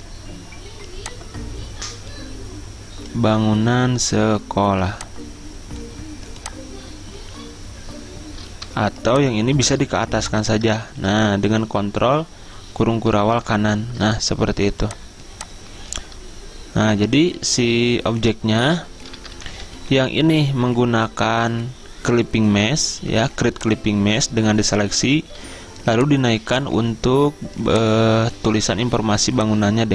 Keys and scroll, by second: 11.1 ctrl+z, 13.6 ctrl+shift+], 19.5 Left, 19.5 Left, 19.8 Left, 20.0 Left, 20.5 Left, 21.3 Right, 25.7 z.